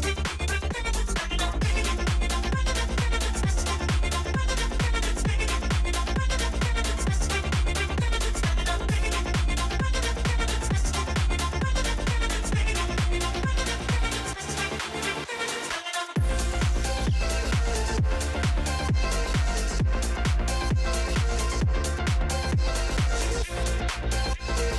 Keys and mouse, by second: 0.5-1.5 drag, 2.5-3.7 drag, 5.8-9.0 right drag, 9.0-11.0 drag, 11.2-13.7 shift+drag, 15.2 shift+click, 23.8 Tab.